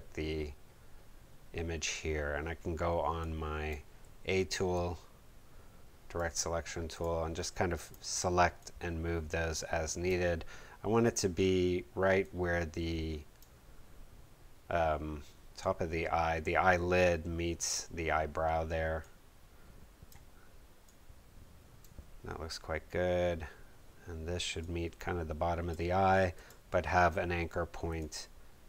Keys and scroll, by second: 4.0 a.